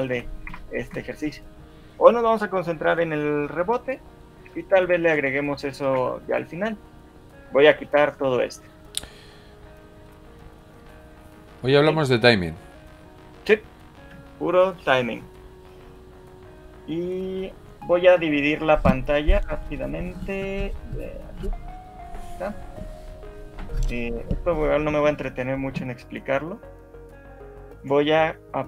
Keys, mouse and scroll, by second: 0.2 Left, 0.5 Right, 1.0 Left, 5.0 shift+middle click, 5.9 alt+shift+2, 10.5 click, 21.9 click.